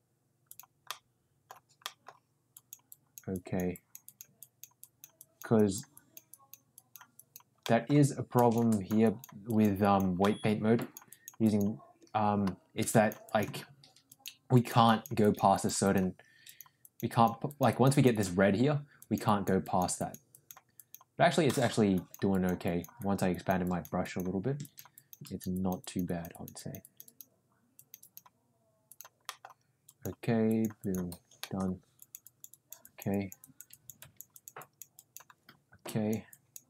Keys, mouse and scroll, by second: 0.4 click, 0.8 middle click, 1.8 middle click, 2.5 click, 2.8 click, 3.3 click, 3.7 click, 4.0 click, 4.3 click, 4.7 click, 5.1 click, 5.5 click, 5.9 click, 6.2 click, 6.7 click, 7.1 click, 7.6 middle click, 8.3 click, 8.6 click, 9.0 click, 9.4 click, 9.8 click, 10.2 middle click, 10.7 click, 11.0 click, 11.4 click, 12.8 click, 13.2 click, 14.0 click, 14.5 click, 14.9 click, 15.2 click, 15.5 click, 15.8 click, 16.4 click, 16.8 click, 17.1 click, 17.5 click, 17.7 click, 18.9 click, 19.2 click, 19.6 click, 20.0 click, 20.3 click, 20.8 click, 21.4 middle click, 21.9 click, 22.3 click, 22.6 click, 22.9 click, 23.3 click, 23.6 click, 24.0 click, 24.6 click, 24.9 click, 25.2 click, 25.5 click, 25.8 click, 26.0 click, 26.3 click, 26.5 click, 26.8 click, 27.7 click, 28.0 click, 28.8 click, 29.2 middle click, 29.8 click, 30.4 click, 30.8 click, 31.3 middle click, 31.9 click, 32.2 click, 32.5 click, 32.8 click, 33.1 click, 33.4 click, 33.7 click, 34.0 click, 34.3 click, 34.6 click, 34.9 click, 35.8 click, 36.3 click.